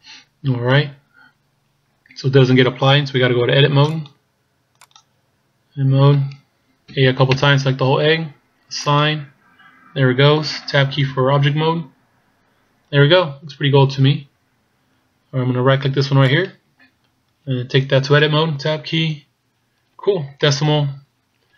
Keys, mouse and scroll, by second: 3.8 click, 5.0 click, 7.0 a, 7.3 a, 8.8 click, 11.2 Tab, 12.8-13.5 scroll down 2, 13.5 scroll down 1, 13.8 scroll down 2, 16.4 right click, 19.0 Tab, 20.4 KP_Decimal.